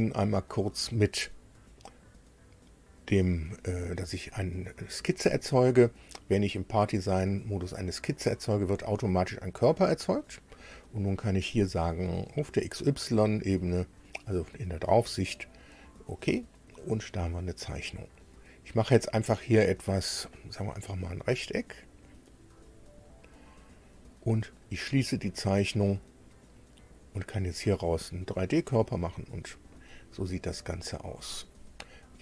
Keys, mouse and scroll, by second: 8.5 click, 12.3 click, 15.3 click, 20.8 click, 21.8 click, 22.6 click, 23.3 right click, 25.2 click, 26.8 click, 28.0 click, 29.0 middle click.